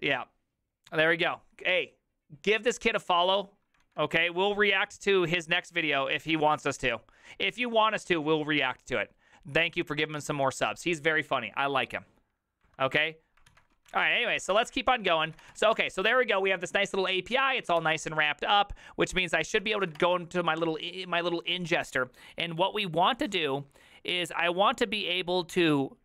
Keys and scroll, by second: 13.8-15.9 typing, 19.2 ctrl+h, 19.2 ctrl+t, 19.5 ctrl+n, 19.6-20.5 typing.